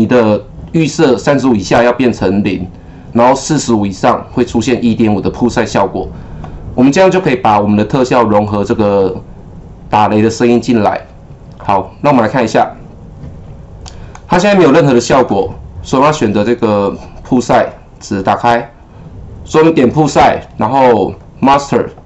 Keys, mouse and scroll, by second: 11.6-17.6 drag, 19.5 click, 19.7 double click, 21.1 click.